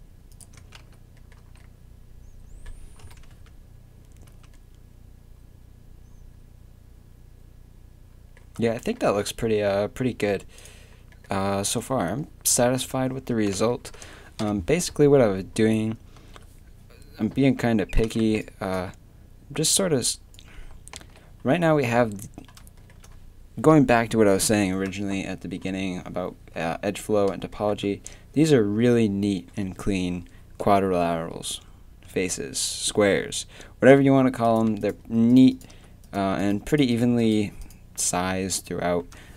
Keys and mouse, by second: 0.0-1.4 typing, 0.6 Tab, 3.0 KP_3, 3.2 Tab, 4.3 Tab, 10.6-13.7 drag, 13.1 Tab, 14.4 KP_7, 17.5 z, 17.8 a, 18.2 b, 21.2 z, 21.2 a, 22.8 middle click, 24.5 click.